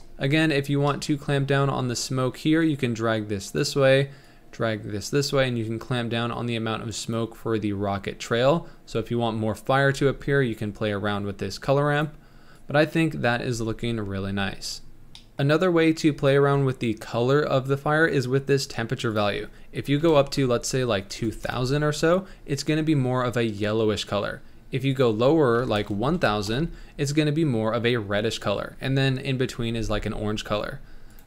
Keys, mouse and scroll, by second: 0.5 scroll up 3, 1.5-2.0 scroll up 1, 2.6-7.4 drag, 11.6-13.7 drag, 13.7 ctrl+s, 15.2 click, 16.4 scroll up 2, 19.2-20.3 drag, 20.3 KP_0, 25.2-26.5 drag, 26.5 KP_0.